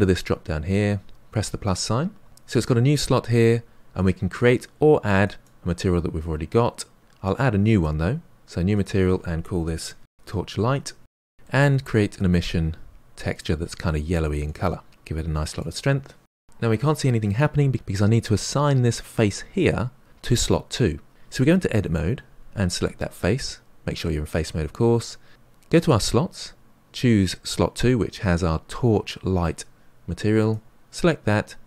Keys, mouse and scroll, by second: 13.7 click, 15.5-21.7 drag, 21.7 Tab, 23.1 click, 25.7-30.3 drag.